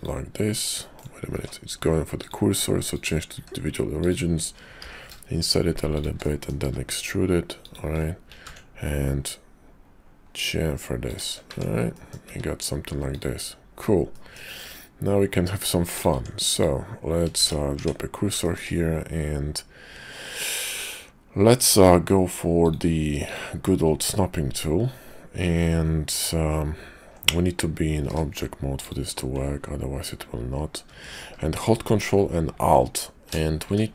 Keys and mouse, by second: 0.7 click, 1.3 ctrl+z, 2.2 click, 3.2 s, 4.7 i, 6.2 click, 6.6 e, 8.2 ctrl+b, 11.4 Tab, 11.9 click, 12.3 `, 14.1 middle click, 14.5 `, 15.9 click, 16.1 Tab, 16.5 click, 17.4 shift+s, 17.7 Tab, 18.4 shift+click, 22.5 click, 23.2-26.1 drag, 27.9 shift+v, 33.5 d.